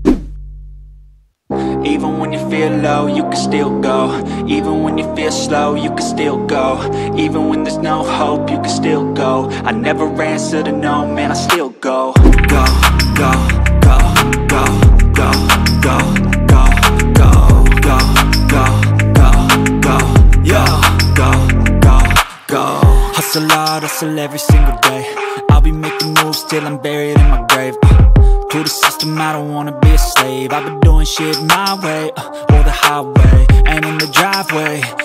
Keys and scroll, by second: 18.0 BackSpace, 18.6 BackSpace, 19.3 BackSpace, 21.3-23.4 typing, 24.0 ctrl+t, 32.8 ctrl+t, 34.0 Left, 34.2 Down.